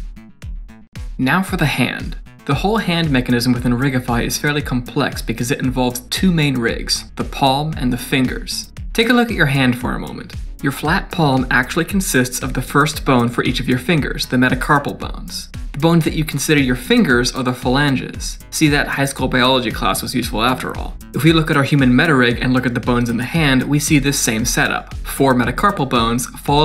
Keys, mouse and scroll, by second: 1.6 middle click, 7.1 click, 7.2 click, 7.4 click, 7.7 middle click, 7.9 click, 8.0 click, 8.3 click, 21.2 middle click, 25.2 click.